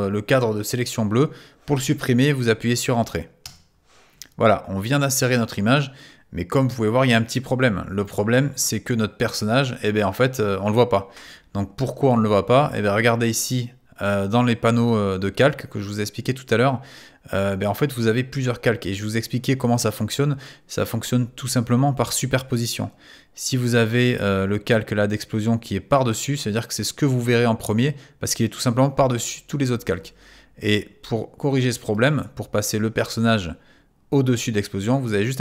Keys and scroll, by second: 3.4 Return.